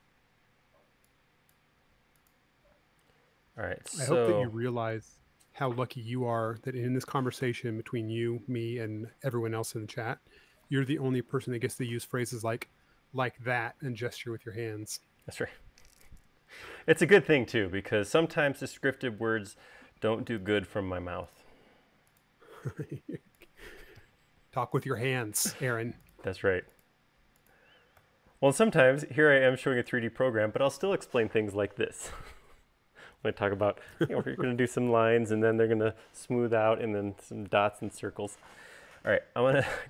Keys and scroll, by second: 3.4 space, 5.6 super+s, 8.1 u, 15.5 super+z.